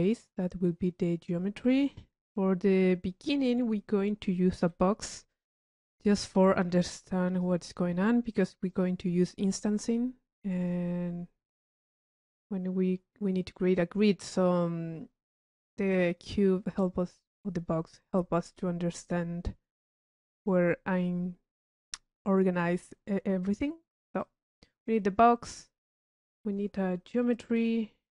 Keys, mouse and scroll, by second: 1.6 click, 6.1 click, 6.7 middle click, 7.4 click, 8.3-8.7 drag, 10.2 middle click, 10.2-10.6 scroll up 1, 10.6 click, 12.2-14.1 middle drag, 24.2 drag, 25.4-26.3 drag, 27.3 click.